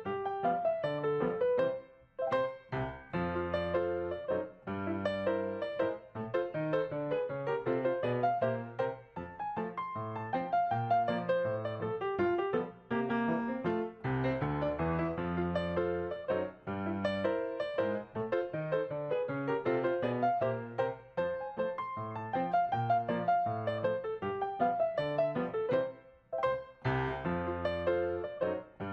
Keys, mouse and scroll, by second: 8.7 right click, 12.4-13.4 typing, 16.3 right click, 17.3 right click, 17.4 right click, 19.7-20.1 typing, 23.2 right click, 25.6-26.5 typing.